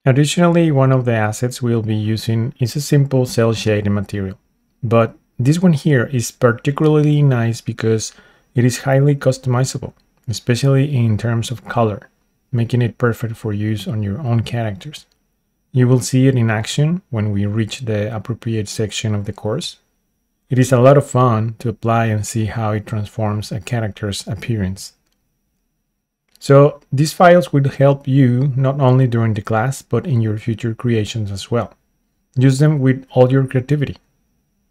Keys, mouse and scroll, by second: 0.5-4.9 middle drag, 4.9 click, 5.5-9.1 middle drag, 10.1 click, 16.8 click, 20.1 click, 22.5 click, 22.9-34.7 middle drag.